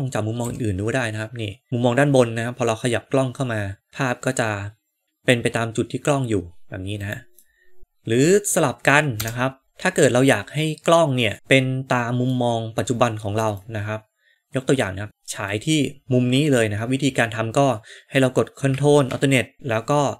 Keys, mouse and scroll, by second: 0.3 g, 7.4 middle click, 9.1 KP_0, 11.3-12.8 middle drag, 12.9 scroll up 1, 13.5-15.6 middle drag.